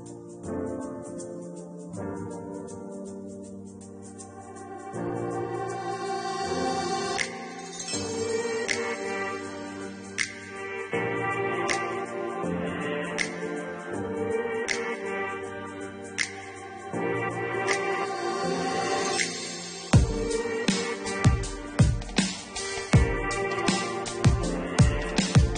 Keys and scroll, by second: 6.3 2, 6.7 0, 9.6 Return.